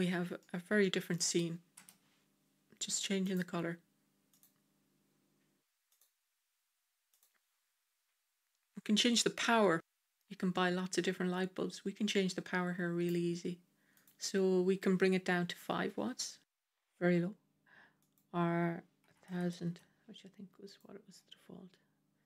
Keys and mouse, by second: 0.3-1.0 middle drag, 1.6 KP_0, 3.2 click, 9.8-13.0 drag, 13.9-16.4 drag, 16.4 KP_0, 18.0-20.5 drag, 19.4 KP_0.